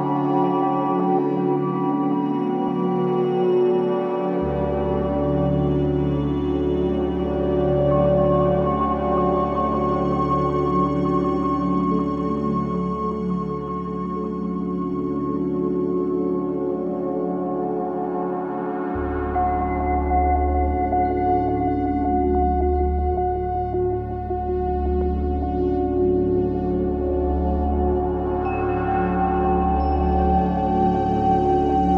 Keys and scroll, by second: 2.8 3, 3.0 ], 4.3 ], 12.2 4, 15.8 ctrl+z, 24.2 2.